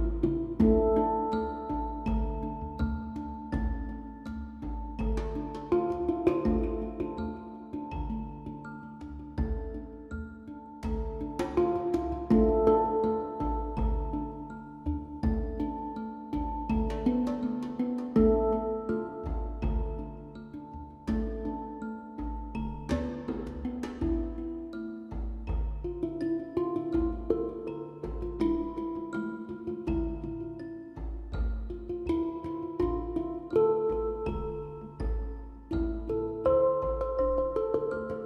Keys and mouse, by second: 4.0-5.9 drag, 7.7-32.2 drag.